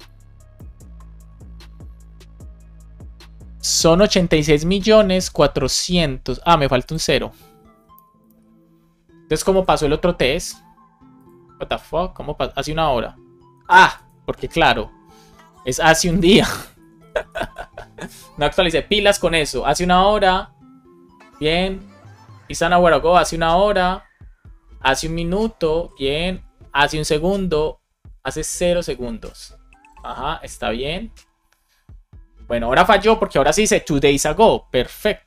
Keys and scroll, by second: 8.2 super+s, 17.3 super+s.